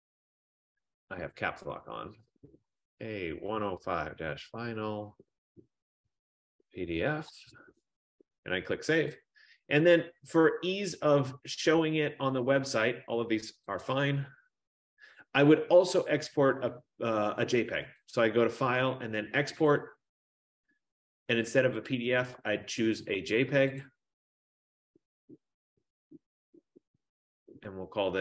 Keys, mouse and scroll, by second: 0.0-7.4 typing, 1.3 Caps_Lock, 9.3 click, 14.2 click, 18.1 click, 19.8 click, 22.0 click, 24.1 click.